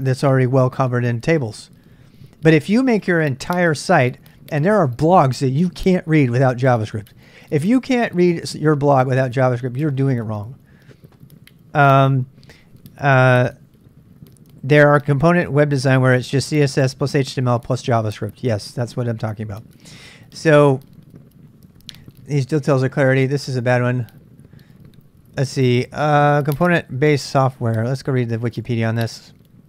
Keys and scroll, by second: 22.3 space, 25.8 j, 26.1-28.1 j, 28.4 k, 29.0 l.